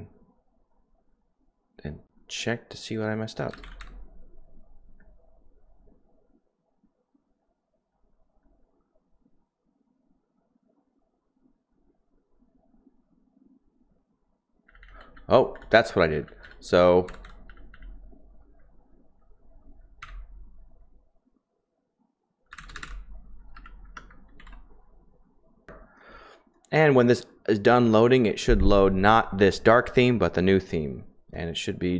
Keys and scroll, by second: 3.6 typing, 4.9-5.6 typing, 7.7-8.2 typing, 14.8-17.7 typing, 20.0 typing, 22.5-26.2 typing.